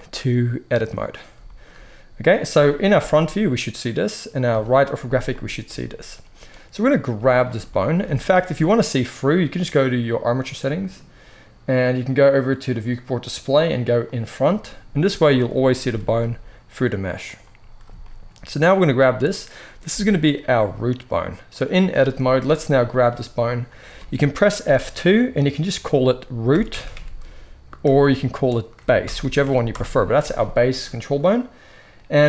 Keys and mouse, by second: 2.8 KP_1, 4.4 KP_3, 6.5-10.2 middle drag, 7.0 z, 8.0 z, 10.2 click, 10.3-12.6 middle drag, 12.6-14.1 drag, 15.3 click, 15.8 g, 19.8 g, 22.8 click, 24.5 F2, 26.7 o.